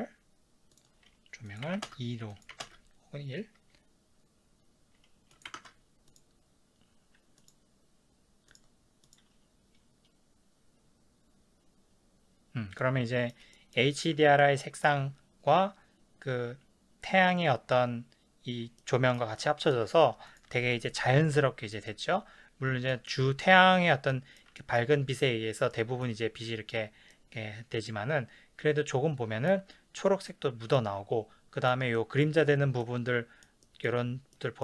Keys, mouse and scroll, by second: 1.9-8.6 drag, 1.9 KP_Enter, 2.7 KP_Enter, 5.6 KP_2, 5.6 KP_Enter, 9.0-12.9 drag, 12.9-20.4 middle drag, 20.4 click, 21.0 KP_Decimal, 21.7-34.6 middle drag.